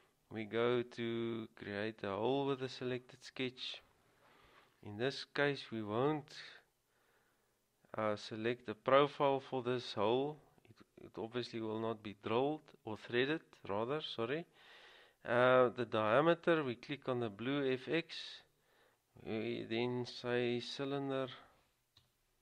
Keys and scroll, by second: 21.4-22.2 typing.